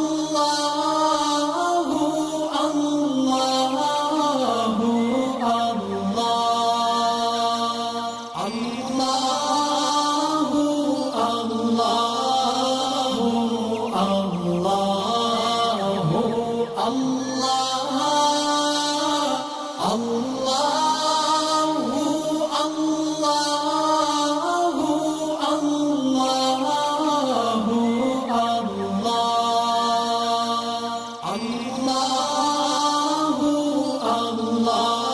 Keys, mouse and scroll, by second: 3.1 alt+scroll down 1, 3.3 space, 3.4 click, 4.6 space, 4.8 click, 5.2 space, 6.5 click, 7.1-7.6 alt+scroll up 2, 8.2-8.9 alt+drag, 12.7-13.9 alt+shift+click, 14.1 alt+shift+click, 14.8-15.3 click, 15.9-16.3 alt+click, 18.3-19.3 drag, 22.8 click, 28.1-29.0 alt+scroll down 2, 29.0 click, 29.5-31.0 alt+scroll up 4, 31.0 click, 32.9-33.3 alt+scroll down 2, 33.5 space, 33.6 click, 34.9 space.